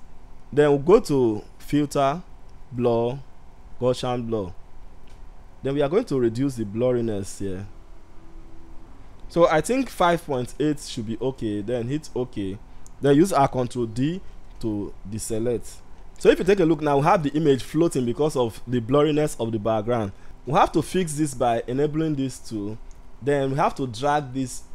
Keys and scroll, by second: 13.7 ctrl+d.